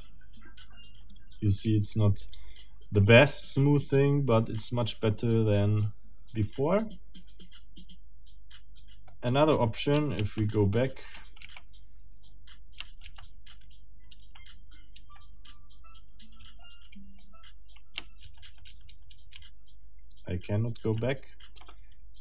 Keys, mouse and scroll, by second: 0.7-1.8 middle drag, 1.7 Tab, 3.0-9.3 middle drag, 10.2 ctrl+z, 12.3 ctrl+Tab, 13.0 ctrl+z, 16.9 ctrl+a, 18.2 ctrl+z.